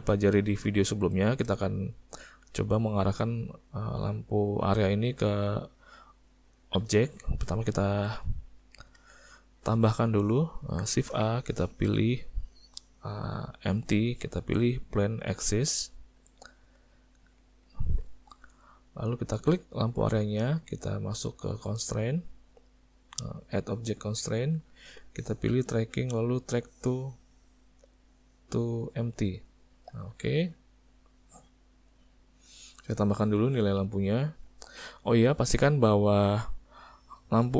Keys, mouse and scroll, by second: 0.0 middle click, 0.5 ctrl+middle click, 0.9 middle click, 1.2 ctrl+middle click, 2.4 click, 3.2 click, 5.8 middle click, 6.6 ctrl+middle click, 7.4 middle click, 7.8 ctrl+middle click, 9.0 alt+a, 9.4 middle click, 10.9 shift+a, 16.6 s, 19.5 click, 22.2 click, 23.4 click, 27.9 click, 30.0 middle click, 30.8 click, 31.9 click, 34.4 click.